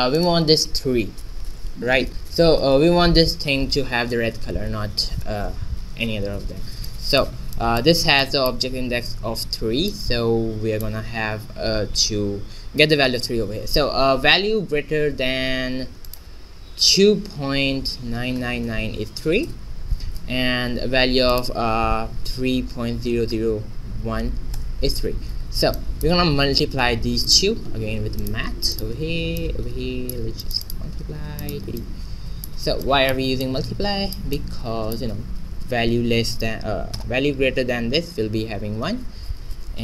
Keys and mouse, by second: 0.1-4.4 right drag, 6.8-10.7 middle drag, 16.0-17.9 drag, 18.3 9, 21.2-23.1 drag, 23.2 0, 25.7-26.7 drag, 26.5 shift+a, 29.3-32.1 drag, 32.1 middle click, 32.5 click, 33.4 middle click, 34.1-37.4 drag.